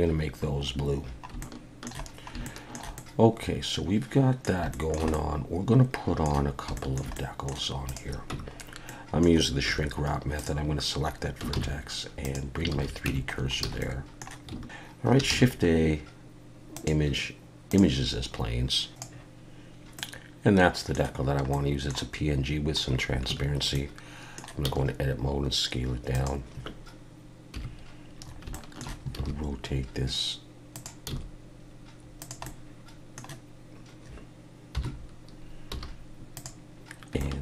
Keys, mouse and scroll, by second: 0.1 scroll down 2, 1.0-1.3 scroll down 4, 1.4 shift+middle click, 2.1 scroll down 1, 2.4 shift+middle click, 3.0 middle click, 4.7 shift+middle click, 5.1 middle click, 6.7 shift+middle click, 7.1 middle click, 7.9 click, 8.4 Tab, 8.6 scroll up 2, 8.9 middle click, 9.7 1, 10.4 click, 11.5 shift+s, 12.8 alt+a, 13.1 Tab, 13.3 scroll down 3, 13.7 alt+a, 13.8 middle click, 15.3 shift+a, 20.0 middle click, 21.2 scroll down 1, 21.5 middle click, 22.5-23.0 scroll down 1, 23.3 Tab, 23.7 middle click, 24.6 s, 27.5 KP_1, 28.2 scroll up 3, 28.5 shift+middle click, 29.2 r, 31.1 s, 32.4 middle click, 34.7 KP_7, 35.7 g, 37.0 scroll up 2, 37.2 shift+middle click.